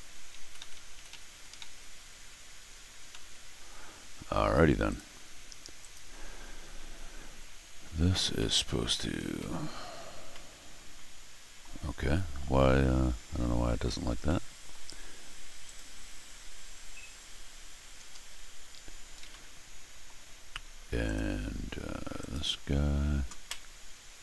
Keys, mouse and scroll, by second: 0.4 Tab, 0.6 Tab, 0.9 Tab, 1.1 Tab, 1.2 Tab, 3.1 shift+Tab, 4.8 click, 5.8 click, 8.4 middle click, 9.4 middle click, 10.3-11.6 middle drag, 14.2 middle click, 15.6 click, 17.9 Return, 19.2 middle click, 21.0 click, 22.2 click.